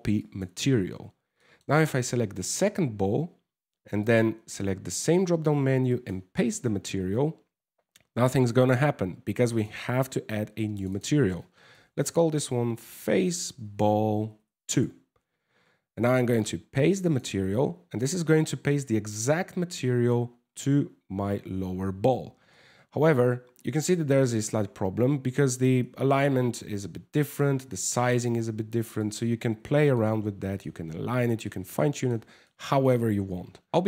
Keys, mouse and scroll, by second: 1.0 shift+middle click, 1.5 right click, 3.6 click, 9.1 click, 10.4 click, 10.5 click, 13.3 l, 16.0 click, 17.6 middle click, 18.1 scroll down 3, 20.1 scroll up 3, 22.2 Tab, 23.1-24.0 scroll down 10, 25.1 r, 26.8 w, 27.0 s, 29.2 Tab, 29.6 middle click, 30.6-31.0 scroll up 3, 31.1 middle click, 32.0 middle click, 33.5 click.